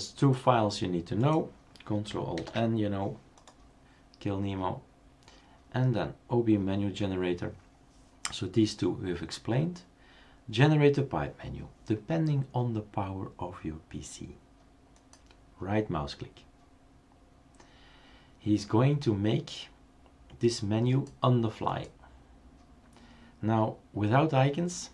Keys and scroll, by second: 2.4 ctrl+alt+n.